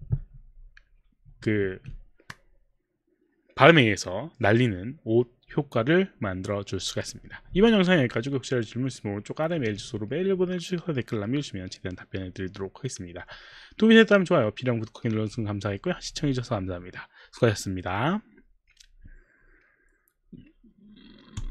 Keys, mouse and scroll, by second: 21.4 click.